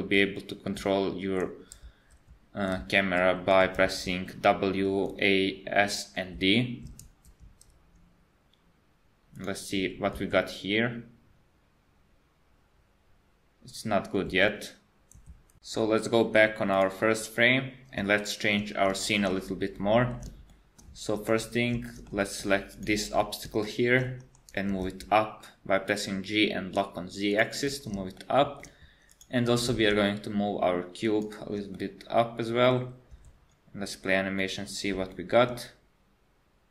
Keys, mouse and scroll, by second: 10.2 space, 14.3 space, 16.8 click, 18.2 shift+middle click, 19.7 middle click, 20.5 shift+middle click, 21.2 KP_1, 21.9 shift+middle click, 22.2 middle click, 22.8 click, 23.7 shift+middle click, 24.2 KP_1, 24.7 g, 28.2 shift+middle click, 29.1 click, 29.6 g, 31.8 middle click, 33.1 space, 33.4-33.7 scroll down 3, 34.4 middle click, 35.1 shift+middle click, 35.1 shift+scroll down 1, 36.3 scroll up 1.